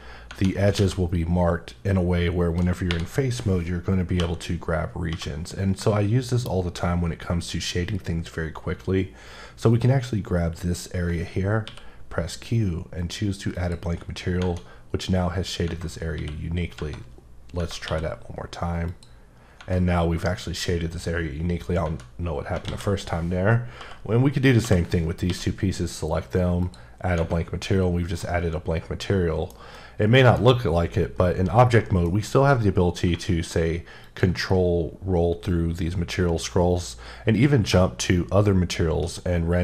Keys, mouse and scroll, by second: 0.8 a, 2.9 3, 4.2 l, 5.1 l, 11.7 q, 13.5 click, 14.4 Tab, 15.7 Tab, 16.1 q, 16.7 Tab, 17.6 Tab, 17.8 q, 18.9 click, 19.6 Tab, 21.8 Tab, 22.6 alt+a, 23.8 l, 24.6 l, 25.3 q, 26.6 click, 28.2 middle click, 29.6 scroll down 1, 29.8 middle click, 32.1 alt+m, 34.0 ctrl+click, 34.7-36.0 scroll up 5, 36.6 scroll up 1, 37.3-37.7 scroll up 1, 38.4-39.0 shift+scroll up 1, 39.1-39.6 scroll up 4.